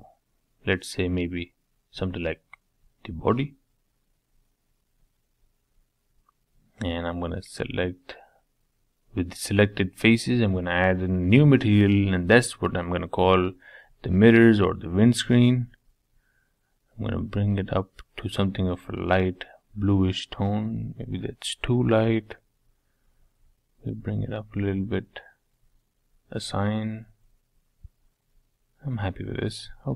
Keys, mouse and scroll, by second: 6.1-11.7 drag, 11.7 e, 13.2-15.6 middle drag, 15.6 click, 18.4 click, 18.9 middle click, 19.5-20.7 scroll up 3, 20.7 middle click, 21.1-22.6 scroll down 2, 22.6 click, 24.9 click, 25.8 Tab, 26.1-28.1 middle drag, 28.1 Tab, 28.4-29.9 middle drag.